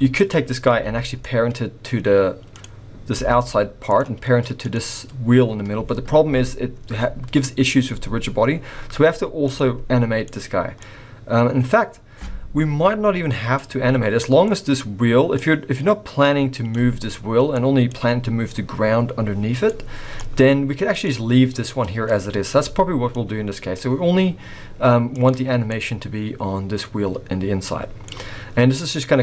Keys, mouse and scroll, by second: 0.2 click, 0.7 g, 2.5 click, 3.1 g, 4.1-4.6 scroll up 2, 4.6 click, 9.5 click, 9.8-11.6 scroll down 3, 10.2 middle click, 11.6-12.5 scroll up 3, 13.3 scroll down 2, 13.5 middle click, 15.4 click, 17.5 middle click, 19.6 middle click, 20.9 click, 23.2 click, 25.1 click, 25.7 middle click.